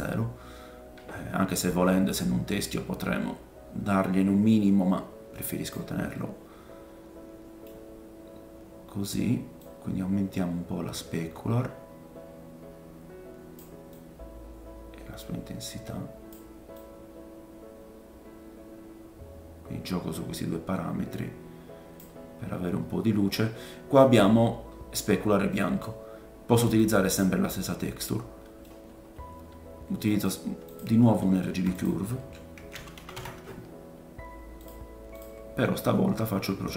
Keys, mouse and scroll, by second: 2.1 click, 6.1 middle click, 9.6 click, 13.9 click, 16.7 click, 24.9-25.5 scroll down 4, 25.5 middle click, 26.8 click, 27.4-27.7 scroll down 2, 28.0 middle click, 28.9-29.4 scroll down 2, 29.4 scroll up 2, 30.2-36.7 drag, 31.3 shift+a, 36.4-36.7 middle drag, 36.4-36.7 right drag.